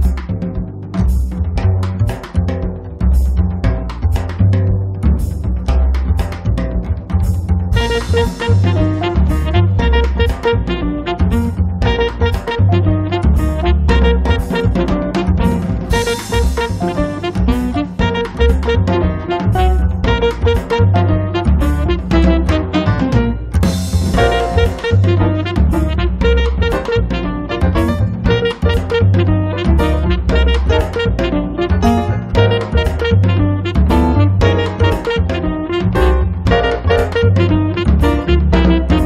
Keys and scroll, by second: 1.7-2.9 typing, 5.8 Delete, 10.3 p, 11.7 5, 11.9 Return, 12.2 space, 16.3 m, 17.4 Up, 19.9 Up, 20.8 4, 21.2 5, 21.5 Return, 21.9 space, 25.8 b, 28.5 space, 38.1 m.